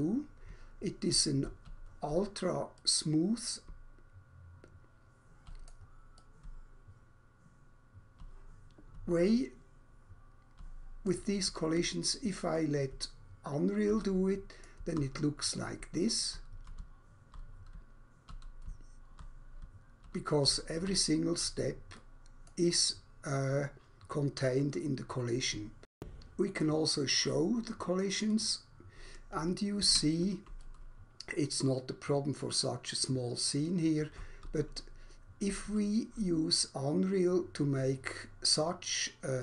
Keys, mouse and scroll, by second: 0.5-2.3 typing, 2.8 right click, 3.6-5.2 typing, 6.5-10.3 typing, 12.0-14.8 typing, 12.5 right click, 16.1-22.3 typing, 22.0 right click, 22.5 right click, 26.0 Escape, 26.6 click, 28.2 click, 29.9 Escape, 30.6 right click, 34.2 s, 34.4 s, 35.6 w.